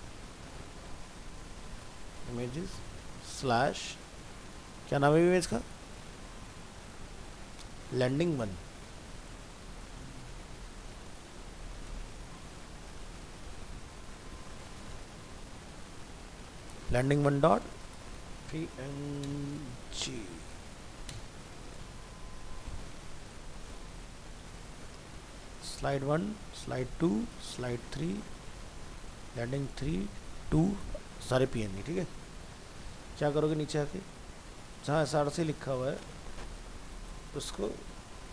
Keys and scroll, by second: 4.3 ctrl+space, 11.8 ctrl+space, 22.2 ctrl+c.